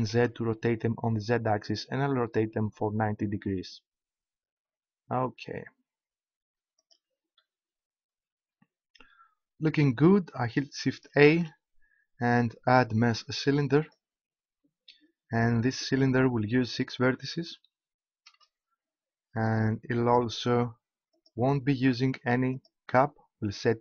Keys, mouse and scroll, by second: 6.9-8.7 drag, 11.3 shift+a, 14.4 click, 16.6-18.4 drag, 19.5-21.8 drag, 22.4 click.